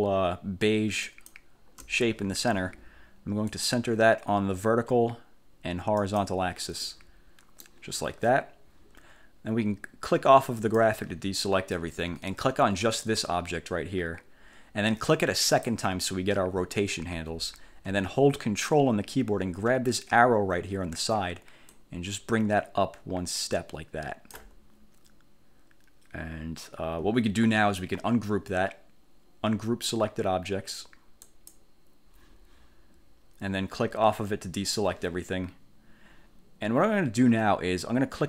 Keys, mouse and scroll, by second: 1.2 shift+click, 3.6 click, 6.1 click, 6.9 click, 7.1 middle click, 7.7 click, 10.7 click, 13.2 click, 15.6 click, 21.8-24.7 ctrl+drag, 31.3 click, 34.7 click.